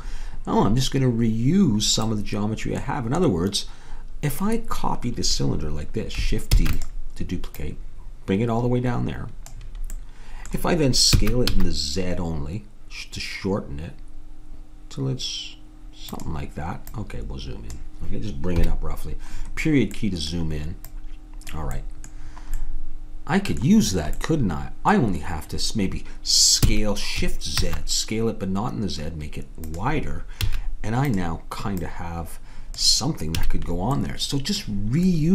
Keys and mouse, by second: 2.2-6.6 middle drag, 6.6 shift+d, 7.5-9.2 drag, 10.2 middle click, 11.1 s, 16.9-18.6 drag, 18.6 KP_Decimal, 20.9-23.1 middle drag, 26.7 s, 30.4 a, 31.1-32.7 drag, 33.4 a.